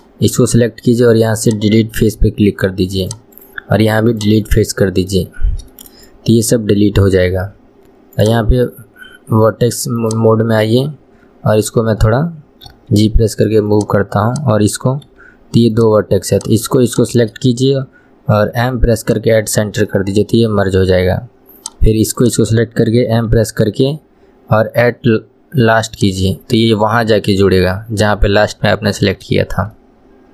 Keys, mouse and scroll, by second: 0.0 click, 1.6 right click, 2.1-3.2 middle drag, 3.2 click, 3.5-4.6 right drag, 4.6 middle click, 5.5 scroll up 2, 5.9-8.3 shift+middle drag, 8.3-10.3 drag, 14.4 click, 16.5 click, 17.0 shift+click, 20.0-21.7 middle drag, 21.7 click, 22.4 shift+click, 27.6-30.3 middle drag.